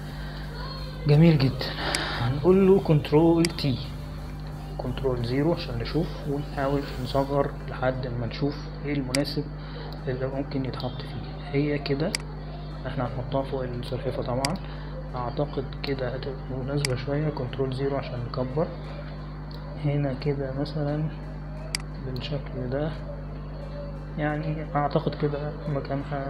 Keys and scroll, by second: 5.5 ctrl+t, 6.9 ctrl+0, 19.5 ctrl+0.